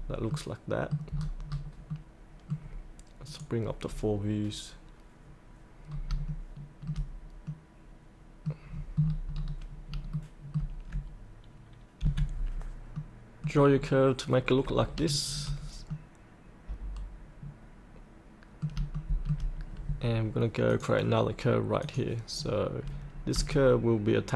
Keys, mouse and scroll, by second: 0.3 middle click, 0.5 middle click, 1.1-1.5 scroll up 1, 1.9 middle click, 3.2 click, 5.9 scroll up 1, 6.3-8.6 shift+middle drag, 8.6-9.3 scroll down 1, 10.1 shift+middle click, 12.0 F8, 12.9 middle click, 13.7 scroll down 1, 14.3 scroll up 1, 15.9 middle click, 17.0-18.7 middle drag, 18.9 shift+middle click, 20.7 click, 23.5 shift+click.